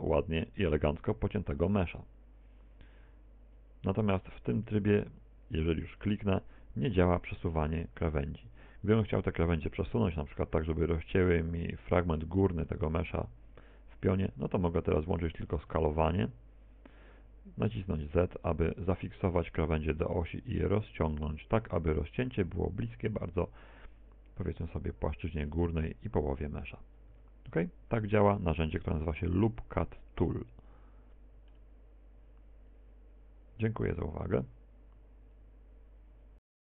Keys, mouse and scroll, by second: 0.8 middle click, 3.0 ctrl+r, 6.2 click, 15.8 s, 23.0 click, 25.4 Tab, 26.4 Tab, 27.2 a, 27.7 middle click, 28.6 middle click, 31.8 middle click.